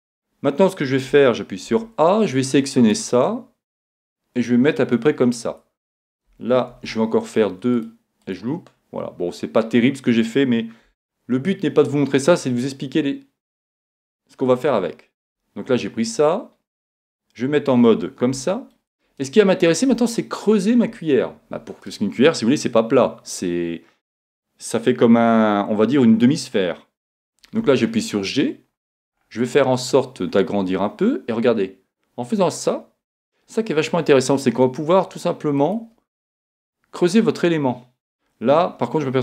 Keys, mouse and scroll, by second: 0.0-1.0 middle drag, 1.1 a, 1.7 b, 3.9-5.6 drag, 6.7 ctrl+r, 8.4-10.1 drag, 10.9 a, 12.0 middle click, 12.2 click, 12.4-14.1 middle drag, 14.0-15.7 right drag, 16.2-18.1 middle drag, 18.4-20.9 middle drag, 27.7 g, 36.2-38.1 middle drag.